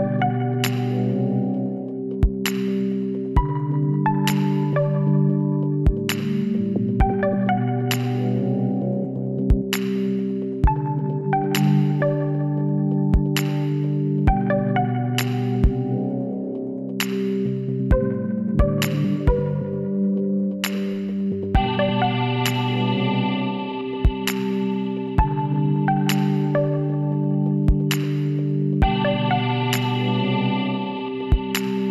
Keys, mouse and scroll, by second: 0.2 Tab, 0.7 a, 1.0 middle click, 1.5 Tab, 2.5 a, 2.6 middle click, 3.2 a, 6.0-8.4 middle drag, 10.6-14.4 middle drag, 14.8-17.4 middle drag, 17.6-20.0 middle drag, 18.4-20.0 drag, 20.0 m, 24.2-26.0 drag, 26.0 middle click, 26.8 Tab.